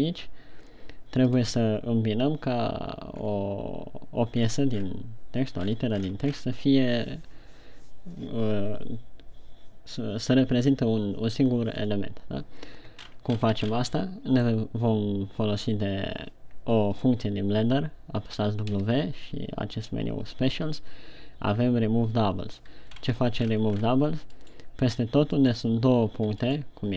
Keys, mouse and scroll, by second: 3.8-4.2 scroll down 2, 5.1-5.6 scroll down 7, 6.2-7.0 scroll up 12, 13.6-14.0 shift+scroll up 3, 14.1-14.5 shift+scroll up 3, 14.7 middle click, 19.2 w, 23.4 shift+scroll up 2, 24.2-24.8 ctrl+scroll up 4, 25.1 right click, 26.0 right click.